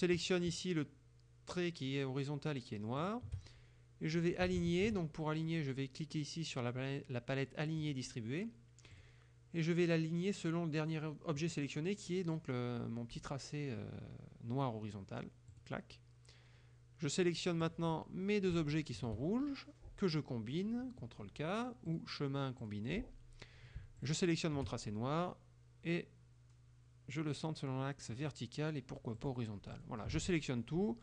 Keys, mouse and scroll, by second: 3.1 shift+click, 7.9 click, 9.0 click, 11.5 click, 15.6 click, 17.7 click, 18.8 shift+click, 22.0 click, 22.7 click, 24.0 shift+click, 28.2 click, 29.2 click, 29.8 click, 30.2 ctrl+a.